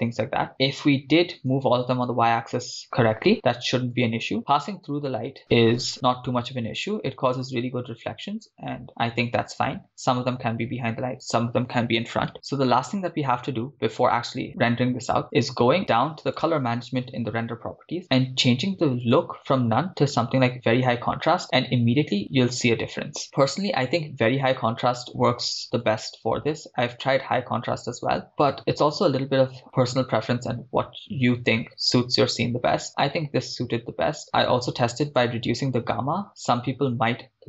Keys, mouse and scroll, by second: 5.0-5.7 drag, 15.3 click, 15.8 scroll down 4, 16.4-17.4 drag, 17.5-18.5 scroll down 2, 19.0-20.9 drag, 25.8-27.6 drag, 29.2-30.3 drag, 33.9-35.1 scroll down 3, 35.2-37.4 drag.